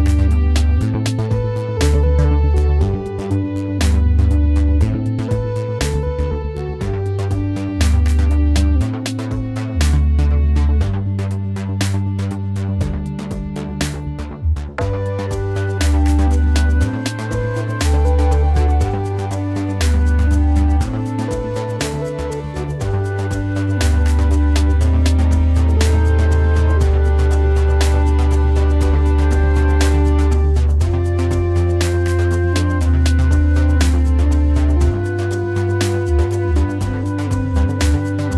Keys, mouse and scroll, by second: 23.7 typing.